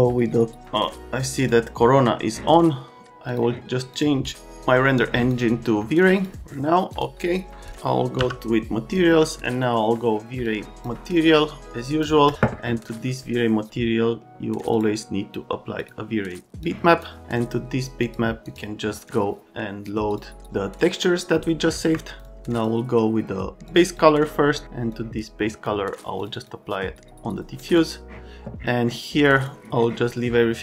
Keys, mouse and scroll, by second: 0.8 click, 1.4 click, 3.3 click, 6.0 click, 8.1 m, 10.4 click, 11.3 click, 12.3 click, 14.7 click, 15.8 click, 16.6 click, 18.0 click, 18.4 click, 20.1 click, 21.8 Escape, 22.1 click, 22.2 click, 22.5 click, 23.7 click, 23.8 click, 24.9 click, 26.2 click, 26.3 click, 27.6 click, 27.8 click, 29.4 click.